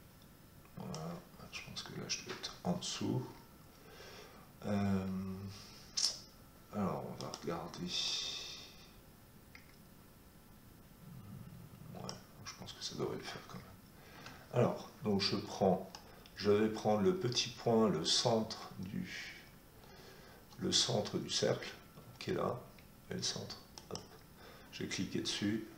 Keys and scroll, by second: 14.1 Escape.